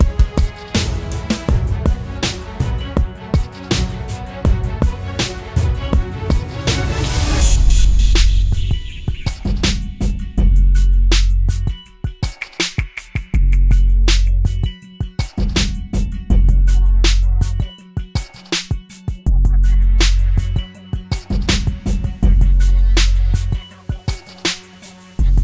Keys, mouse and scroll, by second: 2.4 double click, 4.7-5.1 typing, 6.3 typing, 13.4 typing, 19.2 double click, 20.0-22.0 typing, 23.3 typing.